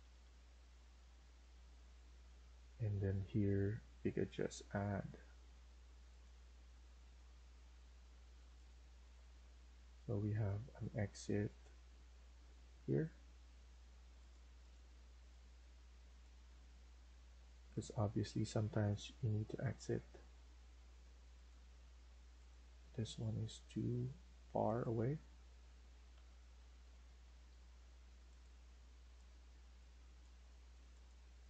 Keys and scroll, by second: 1.7 Escape, 13.1 Escape, 13.3 Escape, 16.5 Escape, 21.7 Escape, 26.0 Delete, 27.2 Escape.